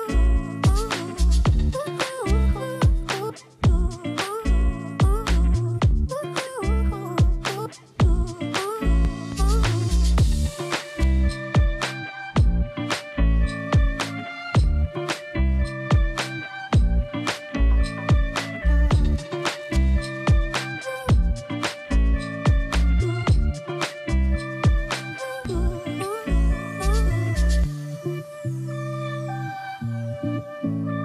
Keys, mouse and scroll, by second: 19.8-20.4 scroll down 1, 20.4 click, 27.6-28.4 scroll down 1, 28.4 click, 28.9 scroll down 1, 29.5 scroll up 1, 30.2 click.